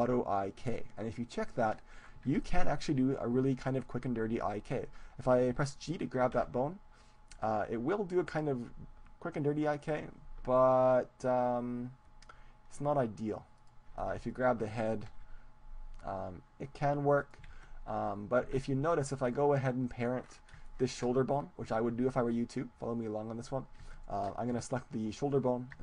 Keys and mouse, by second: 6.7 g, 14.0-17.3 drag, 14.2 ctrl+z, 14.4-17.3 right drag, 17.8 ctrl+z, 17.8-19.2 drag, 18.4 Tab, 19.2-20.2 right drag, 20.2-22.6 middle drag, 23.8-25.8 right drag.